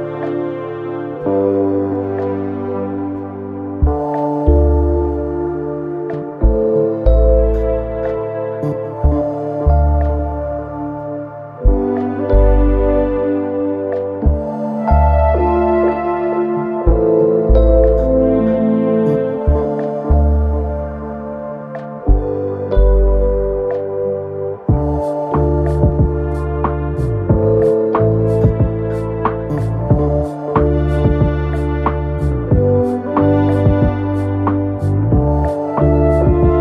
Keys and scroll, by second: 11.1 BackSpace, 14.0 BackSpace, 14.2 BackSpace, 16.0 KP_4, 16.5 KP_0.